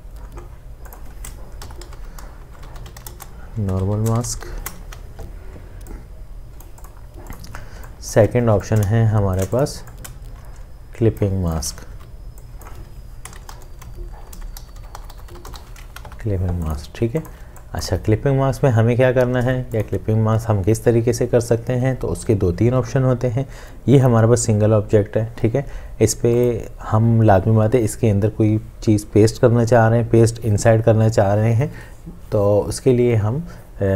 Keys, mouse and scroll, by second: 1.3-2.7 right drag, 1.7-5.3 typing, 7.8 space, 8.7 alt+click, 11.9 t, 13.2-16.2 typing, 17.0 ctrl+space, 19.4 ctrl+space.